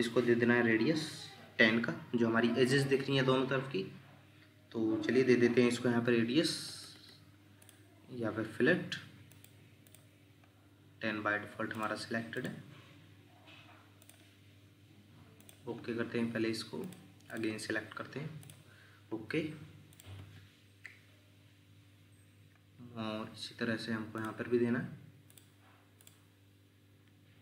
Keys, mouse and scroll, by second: 6.4 Escape, 9.9 double click, 17.3 double click, 21.4 Escape.